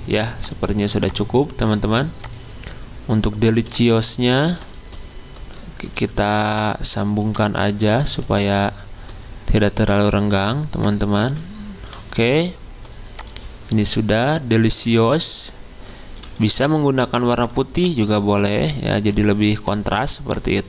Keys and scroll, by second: 6.3 alt+Left, 6.5 alt+Left, 7.2 alt+Left, 7.7 alt+Left, 8.1 alt+Right, 8.3 alt+Right, 8.5 alt+Right, 16.3 d.